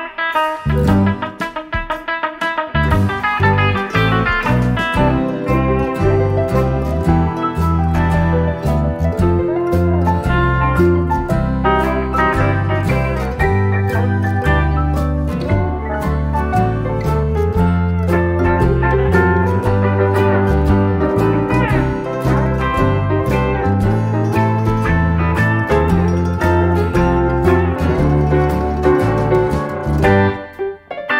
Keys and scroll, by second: 2.8 -, 3.2 space, 5.0-5.4 typing, 6.4 ctrl+d, 16.3-16.8 typing, 18.1 space.